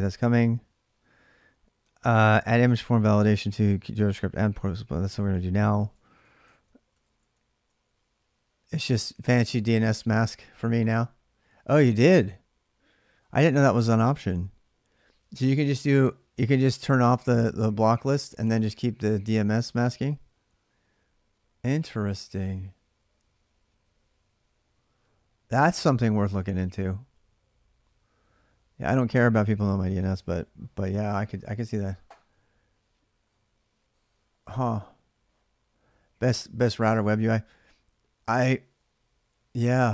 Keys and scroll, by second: 0.1-3.0 typing, 4.1 ctrl+a, 4.3 ctrl+a, 4.9 ctrl+[, 5.2-7.4 typing, 6.3 ctrl+c.